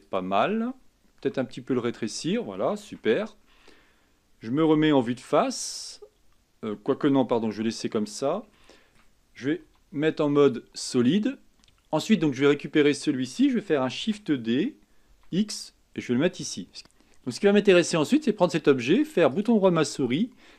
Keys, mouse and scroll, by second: 1.4 s, 3.0 Tab, 5.1 KP_1, 7.5 KP_7, 8.8-9.8 shift+middle drag, 9.8 z, 11.5-13.0 drag, 14.2 shift+d, 16.8 click, 18.7 click, 19.5-20.5 right drag.